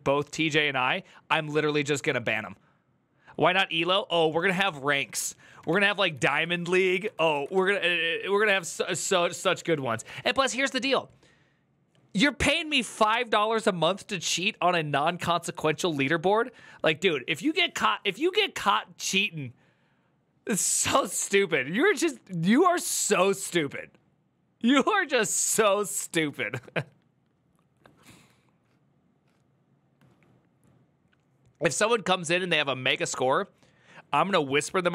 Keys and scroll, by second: 5.4 typing, 6.7-7.4 typing.